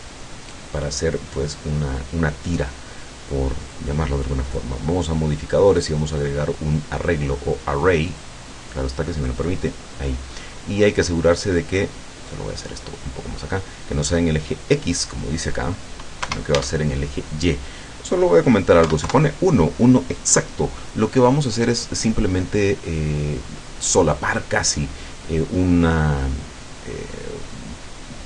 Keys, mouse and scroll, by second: 3.7 click, 5.8 click, 7.0 click, 8.1 click, 9.4 click, 12.5 click, 15.2 click, 16.3 KP_0, 16.5 Tab, 18.9 KP_1, 19.1 KP_Enter.